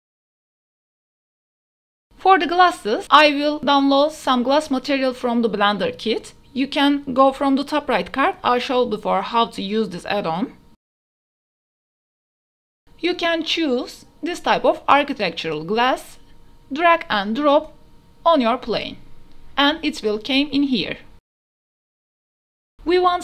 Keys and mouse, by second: 0.6 ctrl+s, 1.9 click, 2.5 shift+drag, 4.1 click, 4.8 click, 15.0 click, 19.7 middle click, 20.4 click, 21.1 h, 21.4 ctrl+z, 21.5 click, 21.7 h, 21.9 click, 22.4 ctrl+z.